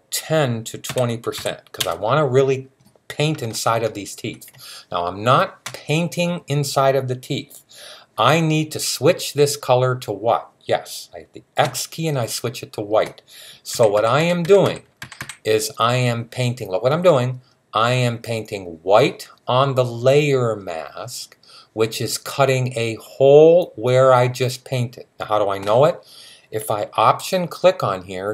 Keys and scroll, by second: 0.7-1.1 typing, 11.4 typing, 13.5-15.0 typing.